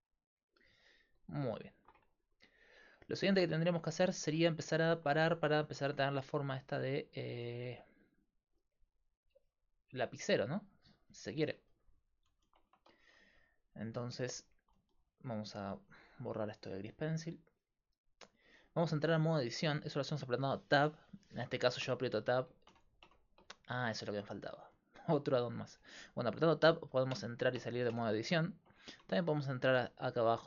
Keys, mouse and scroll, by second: 0.9-3.6 middle drag, 0.9-2.8 right drag, 5.9-11.7 d, 6.6-8.2 drag, 10.0-12.7 drag, 12.7 Tab, 13.8 Tab, 17.3-19.2 drag, 21.8-22.7 Tab, 23.1 Tab, 26.7 Tab, 27.1 Tab, 27.6 Tab, 27.9 Tab, 29.0-30.4 Tab.